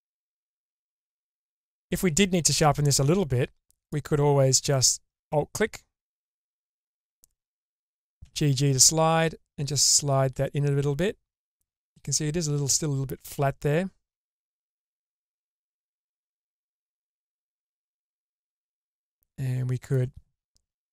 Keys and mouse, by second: 0.3 Tab, 1.9 middle click, 6.1 middle click, 8.2 g, 11.8-15.1 middle drag, 12.5-14.2 drag, 14.7 click, 16.3 click, 16.3-17.3 middle drag, 18.1 alt+click, 19.1 middle click.